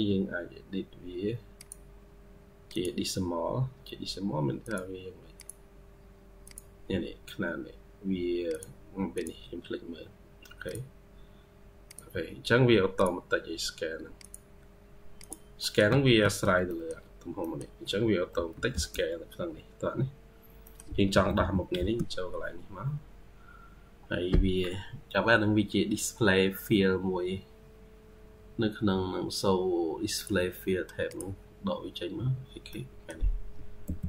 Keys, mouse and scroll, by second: 15.5 middle click, 15.7 Escape, 16.0 Escape, 16.2-16.5 scroll down 1, 16.5 middle click, 17.3 middle click, 17.8-18.2 scroll up 1, 18.2-21.0 typing, 19.0-19.6 scroll up 2, 20.2 scroll down 1, 20.5 middle click, 32.6 middle click, 33.7 typing.